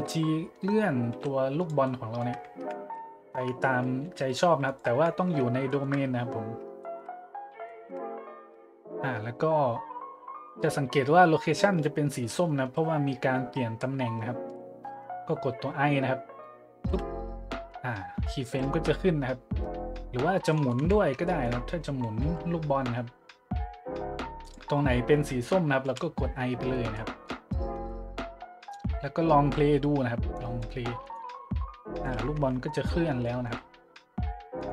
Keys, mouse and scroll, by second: 1.1 g, 1.6-1.9 drag, 2.6 `, 3.4 `, 4.0 g, 4.6-5.0 drag, 4.9 `, 5.7 shift+middle click, 6.1 shift+middle click, 6.5 middle click, 6.8-7.1 shift+middle drag, 7.2 middle click, 7.6 shift+middle click, 16.9 i, 20.5-20.8 drag, 20.8 `, 21.3-21.6 shift+drag, 22.2 r, 24.4 click, 25.8 i, 26.9-27.2 middle drag, 27.5-27.9 middle drag, 28.7 click, 30.3-30.7 drag, 31.0 click, 32.0-32.6 middle drag, 32.3 `, 32.9 middle click, 33.2-33.5 shift+middle drag, 34.6-34.7 drag.